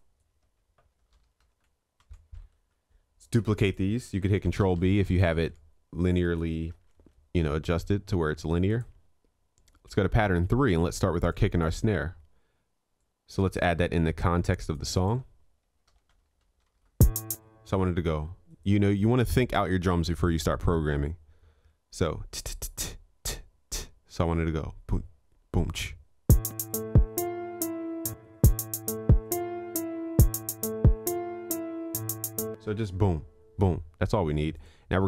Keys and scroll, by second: 2.1 ctrl+s, 4.3 ctrl+b, 6.8 ctrl+s.